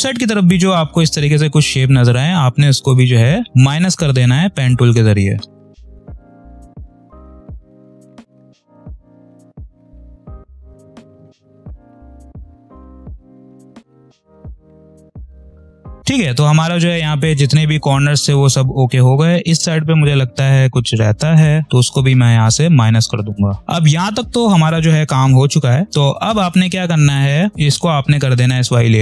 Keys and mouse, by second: 0.7 space, 0.9 click, 1.2 space, 2.8 click, 3.3 space, 3.4 click, 3.5 space, 5.4 click, 6.0 space, 6.1 click, 6.1 space, 6.7 click, 7.3 ctrl+z, 7.4 click, 9.0 space, 9.0 click, 9.1 space, 9.5 click, 10.5 space, 10.5 click, 10.6 space, 10.9 click, 11.8-14.4 typing, 11.8 click, 12.2 click, 12.6 click, 13.0 click, 13.3 click, 13.6 click, 14.2 click, 14.2 click, 14.4 click, 14.8 click, 16.1 click, 16.4 space, 18.8 click, 19.3 space, 21.2 space, 21.4 click, 21.6 space, 22.5 click, 23.6 space, 24.1 space, 26.7 click, 27.1 space, 27.5 click.